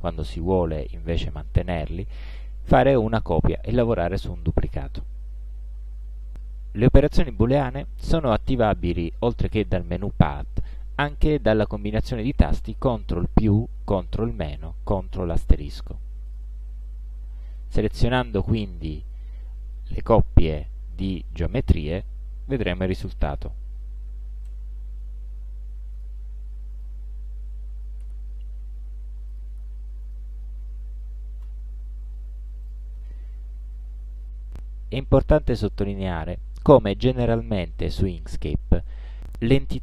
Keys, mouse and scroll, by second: 6.6 click, 7.5 shift+click, 11.3 click, 16.3 click, 17.6 click, 18.2 click, 19.1 shift+click, 24.5 ctrl+KP_Add, 26.0 click, 26.8 shift+click, 28.1 ctrl+KP_Subtract, 29.3 click, 30.1 shift+click, 32.7 click.